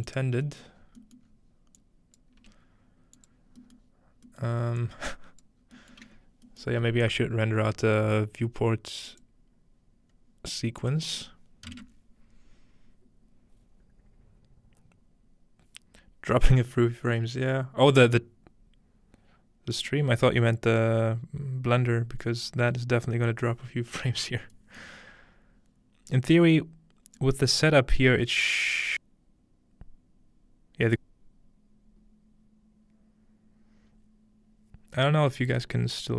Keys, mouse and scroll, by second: 0.8-6.8 drag, 0.8-2.8 middle drag, 0.8-2.8 scroll, 2.8 g, 4.8-8.8 middle drag, 10.8-12.9 drag, 10.8-11.7 scroll up 1, 24.8-26.8 scroll up 1.